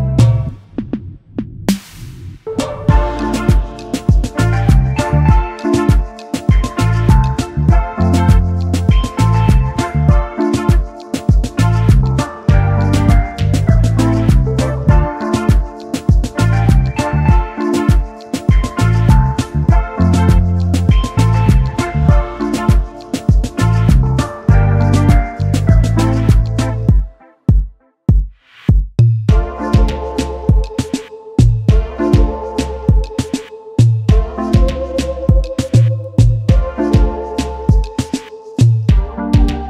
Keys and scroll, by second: 16.7 space, 16.7 space, 35.2-36.7 typing.